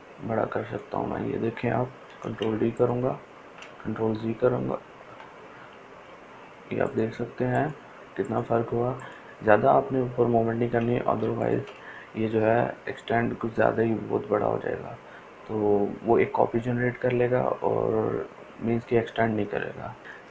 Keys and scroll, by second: 2.5 ctrl+d, 3.0 ctrl+space, 4.5 ctrl+z.